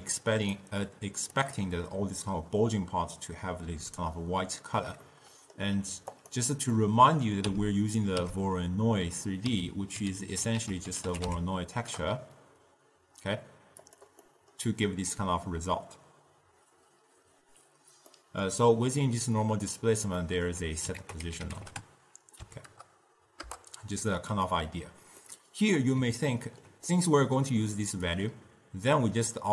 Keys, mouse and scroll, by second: 0.0 d, 0.4 click, 0.6 d, 1.0-1.5 drag, 1.5 d, 1.5 d, 5.1-6.2 middle drag, 6.2 click, 6.9 middle click, 7.6 m, 8.4 m, 9.7 m, 10.2 m, 10.7 ctrl+a, 14.3-17.5 middle drag, 18.2-21.1 middle drag, 21.1 ctrl+a, 25.3-28.2 middle drag, 28.2 click.